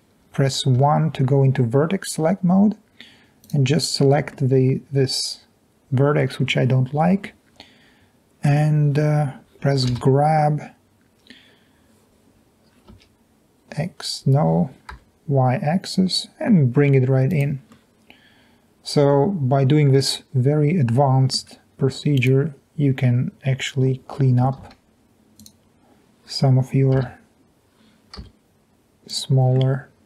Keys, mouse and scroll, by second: 0.9 1, 3.4 click, 4.4 middle click, 7.2 middle click, 10.0 g, 13.0 x, 15.1 y, 17.3 click, 17.9 middle click, 18.1 middle click, 18.5 middle click, 18.7 middle click, 18.9 middle click, 19.1 middle click, 20.2 middle click, 20.4 middle click, 20.6 middle click, 24.6 ctrl+z, 27.1 g, 28.3 y, 29.7 middle click, 29.9 middle click.